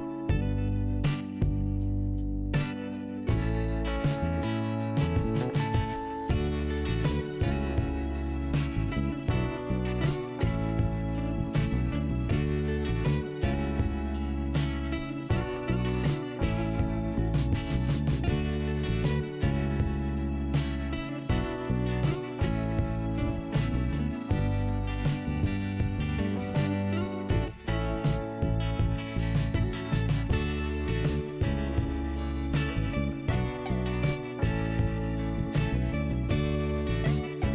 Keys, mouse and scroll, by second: 2.6 ctrl+i, 3.5 scroll up 2, 4.3-5.1 scroll down 1, 5.1 click, 7.1 click, 8.1 click, 8.7 scroll up 1, 9.7 click, 14.9 click, 17.3 click, 20.0 click, 21.2 click, 23.4 click, 24.4 click, 25.5 click, 28.3 click, 30.9 click, 32.9 click, 34.0 click, 35.1 scroll down 1, 36.5 scroll up 1, 37.4 scroll up 1.